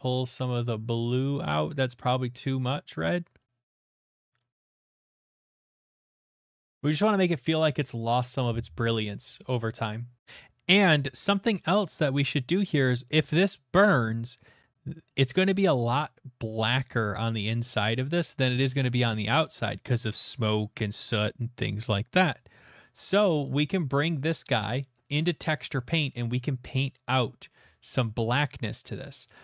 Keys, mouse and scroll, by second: 0.9 click, 1.5 click, 4.1 click, 4.7 click, 5.0 click, 6.1 click, 7.8-9.1 scroll, 9.7 middle click, 10.2 click, 10.2 shift+middle click, 10.8 middle click, 11.2 shift+middle click, 12.8 middle click, 13.1 middle click, 13.3 shift+middle click, 14.5 middle click, 15.1 middle click, 15.3 middle click, 15.3 middle click, 15.3 middle click, 15.4 shift+middle click, 17.1 scroll, 18.0 scroll, 18.6 middle click, 20.4 scroll, 22.2 middle click, 24.3 click, 25.5 middle click, 25.7 middle click, 25.7 middle click, 27.2 middle click, 27.8 shift+middle click, 29.0 shift+middle click.